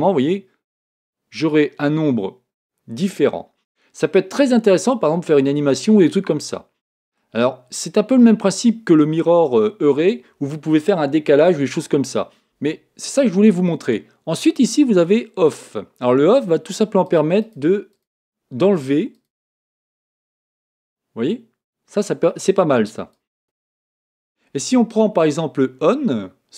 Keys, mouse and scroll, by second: 4.1-6.2 middle drag, 7.6 middle click, 8.3-9.5 scroll up 1, 9.5 scroll up 1, 9.7 middle click, 17.0-20.8 drag, 20.0-22.0 middle drag, 23.1 click.